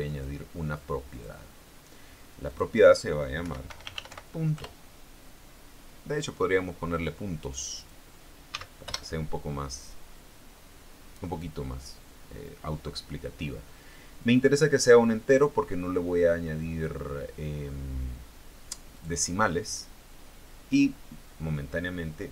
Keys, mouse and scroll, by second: 1.3 click, 2.7 click, 3.6-4.2 typing, 4.8 Return, 7.6 click, 8.7 s, 9.6 Return, 15.5 click, 19.1 click.